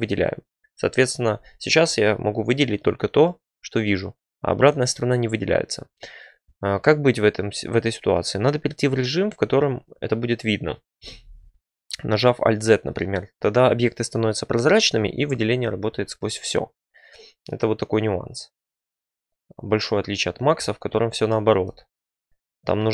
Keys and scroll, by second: 11.1 alt+z.